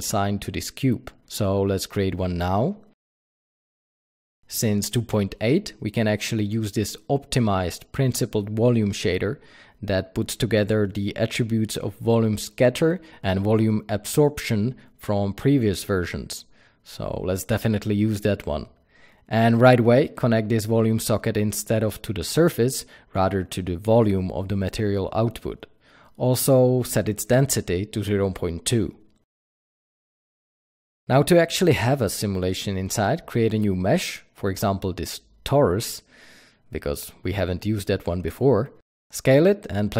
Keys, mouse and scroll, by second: 1.4 n, 2.5 ctrl+s, 3.6 s, 5.3-26.1 drag, 9.5-14.6 scroll up 1, 25.5 scroll up 2, 25.9 scroll down 1, 27.5-30.5 drag, 28.3 KP_Enter, 30.5 Delete, 33.4 shift+a, 37.3 g, 38.3 click, 38.7 s, 39.1 click, 39.5 g, 39.9 click.